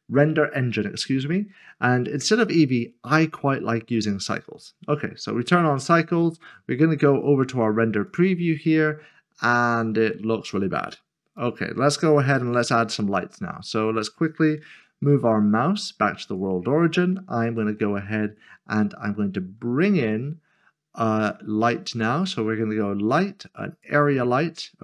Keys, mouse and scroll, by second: 2.7 click, 8.1 click, 11.4 click, 14.1-14.6 typing, 17.5 a, 23.7 click.